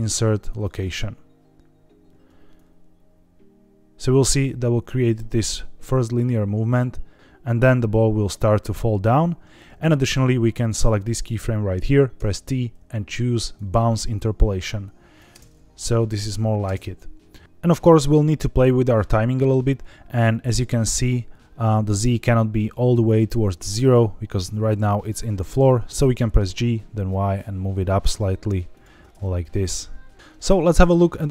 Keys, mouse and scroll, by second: 2.5-9.7 drag, 10.6 click, 12.1 t, 14.6-15.1 drag, 15.2 space, 16.6 space, 16.9-17.3 drag, 18.0-20.6 drag, 21.8 click, 26.4 g, 26.7 y, 28.6-28.9 shift+drag, 29.3-30.1 drag, 30.1 space, 30.5-30.8 middle drag, 30.9 scroll down 3, 31.2 middle drag.